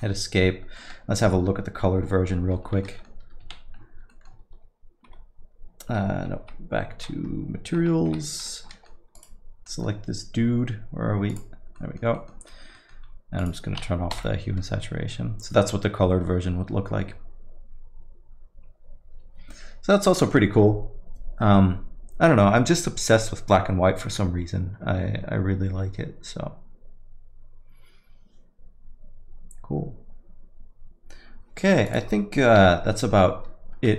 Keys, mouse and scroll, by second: 2.5 shift+F5, 2.8 middle click, 3.4 z, 4.4 middle click, 5.0 shift+F5, 6.4 shift+F3, 7.8 shift+F3, 8.1 shift+F3, 8.7 middle click, 9.1 click, 9.7 middle click, 11.3 click, 11.8 middle click, 12.1 middle click, 12.5-13.2 scroll up 5, 12.8 middle click, 13.5 click, 14.2 m, 31.9 click, 32.6 m, 32.9 middle click.